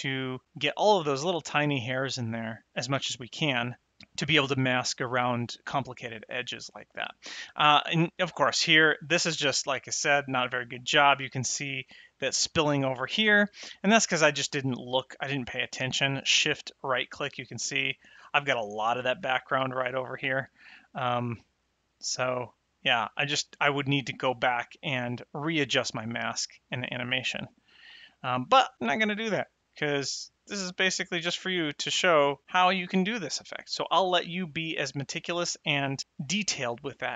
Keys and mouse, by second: 7.4 middle click, 9.2 click, 16.7 shift+right click, 20.7 shift+right click, 21.4 shift+right click.